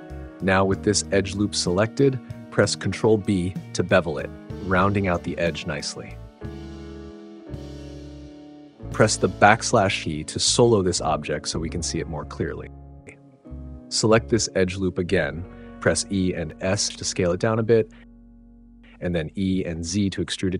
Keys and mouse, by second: 0.5 click, 2.1 alt+click, 3.9 ctrl+b, 10.2 /, 15.7 e, 16.4 s, 17.8 click, 19.9 e.